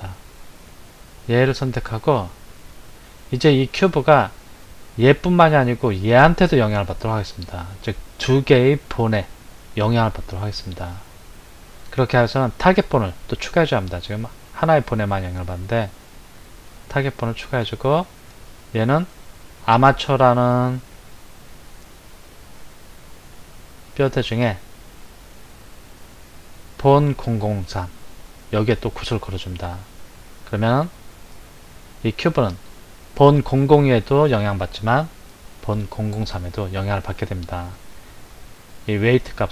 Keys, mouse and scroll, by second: 1.2 click, 16.6-21.3 drag, 25.0-28.1 drag.